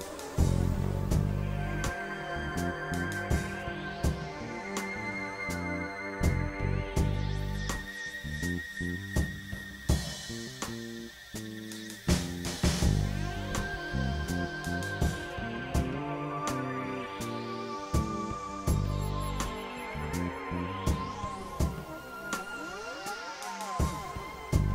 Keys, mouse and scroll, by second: 2.2 click, 3.1 click, 3.7 click, 4.6 click, 5.4-6.4 drag, 7.9 click, 9.3 click, 10.7 click, 11.7 click, 12.4-14.7 drag, 15.7 click, 16.4 KP_Divide, 17.7 right click, 19.6 KP_Divide, 21.9-22.7 drag, 22.8 click, 23.4-24.7 drag.